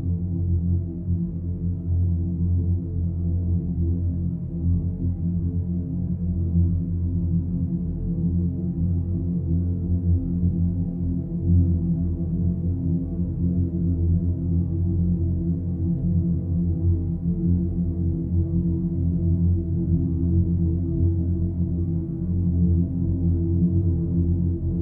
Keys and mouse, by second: 2.8 click, 4.7 Tab, 5.7 click, 6.4 g, 10.2 g, 12.1 click, 12.2 g, 14.2 click, 15.8 click, 15.9 g, 18.8 click, 19.0 g, 22.1 click, 22.3 g.